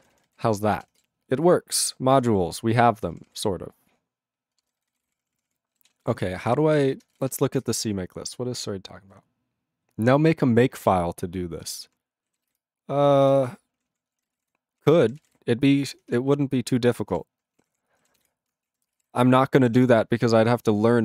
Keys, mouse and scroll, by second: 0.0 ctrl+n, 0.2 ctrl+n, 0.3 ctrl+g, 2.0 ctrl+g, 2.9 ctrl+p, 3.1 ctrl+p, 3.2 ctrl+p, 4.6 ctrl+space, 4.6 ctrl+n, 4.8 ctrl+n, 4.9 ctrl+n, 4.9 ctrl+g, 5.0 ctrl+e, 5.0 ctrl+p, 5.2 ctrl+p, 5.4 ctrl+p, 5.8 ctrl+s, 11.4 ctrl+Return, 11.5 ctrl+n, 12.6 Return, 13.3 ctrl+n, 13.3 ctrl+n, 13.7 ctrl+p, 13.9 ctrl+p, 14.1 ctrl+space, 14.1 ctrl+e, 14.2 ctrl+n, 14.3 ctrl+e, 14.4 ctrl+g, 14.7 ctrl+p, 14.8 ctrl+a, 14.9 ctrl+p, 15.0 ctrl+e, 15.0 ctrl+n, 15.1 ctrl+n, 15.2 ctrl+e, 15.2 ctrl+g, 17.2 ctrl+g, 17.6 ctrl+a, 17.7 ctrl+p, 18.3 Return, 18.7 ctrl+a, 18.8 ctrl+space, 18.9 ctrl+e, 19.0 ctrl+g, 19.8 ctrl+s.